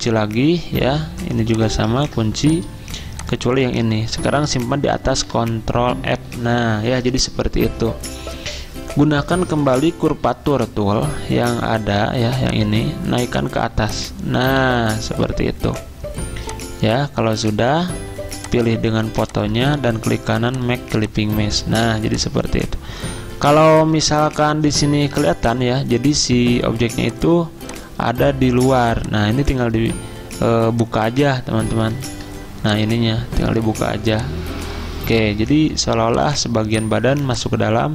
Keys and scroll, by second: 0.9 ctrl+2, 2.0 ctrl+2, 5.1 ctrl+f, 21.8 z, 23.9 ~, 25.1 a, 32.1 ctrl+z, 37.1 z.